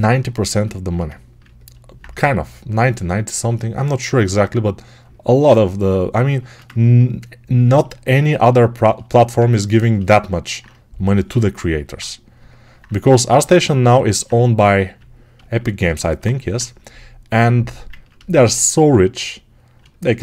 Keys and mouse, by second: 3.0-7.7 alt+right drag, 7.7-11.8 alt+shift+drag, 11.8-20.2 right drag.